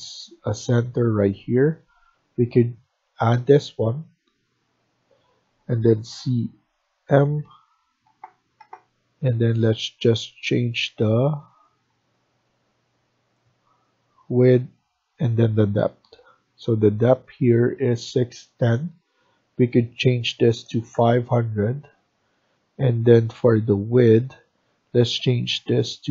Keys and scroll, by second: 6.0 c, 7.1 m, 8.5 m, 10.5 Escape, 10.7 Escape, 11.0 Escape, 20.1-20.5 typing.